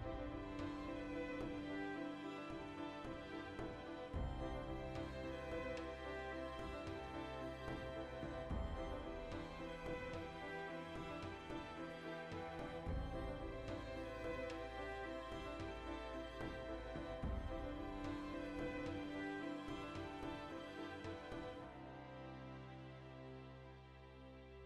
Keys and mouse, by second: 1.0-1.5 drag, 1.3 Tab, 1.5-7.0 ctrl+middle drag, 7.0 click, 8.0-12.8 shift+middle drag, 8.3 z, 12.8 click, 13.2-15.2 middle drag, 15.2 alt+q, 16.0 b, 16.1 shift+middle click, 17.4 click, 17.9 click, 19.9 click, 22.4 click.